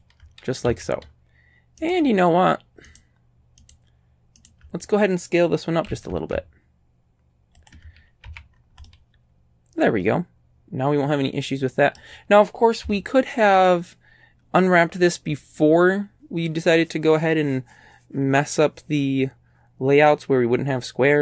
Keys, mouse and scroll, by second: 0.7 ctrl+a, 1.9 shift+right click, 2.9 shift+right click, 3.7 shift+right click, 4.4 shift+right click, 5.9 s, 7.6 ctrl+click, 8.3 ctrl+a, 8.5-8.8 scroll down 2, 8.9 click, 12.9 z, 13.6 click.